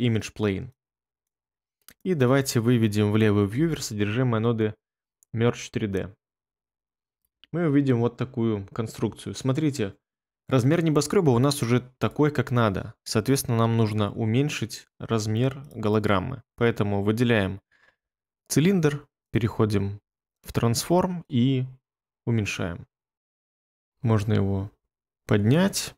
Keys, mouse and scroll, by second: 3.4 1, 5.6 ctrl+middle click, 5.7 ctrl+middle click, 5.8 ctrl+middle click, 5.9 ctrl+middle click, 6.0 ctrl+middle click.